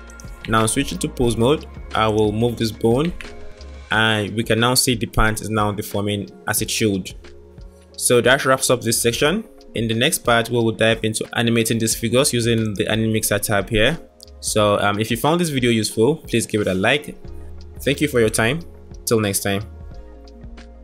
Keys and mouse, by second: 0.5 Tab, 3.0 g, 6.7 Tab, 12.6 click, 17.7 click.